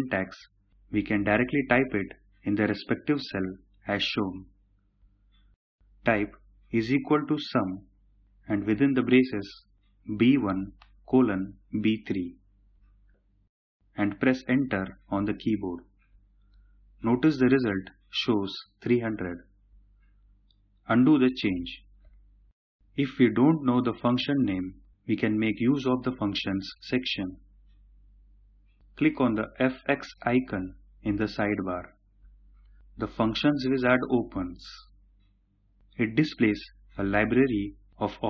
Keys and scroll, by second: 20.8 ctrl+z.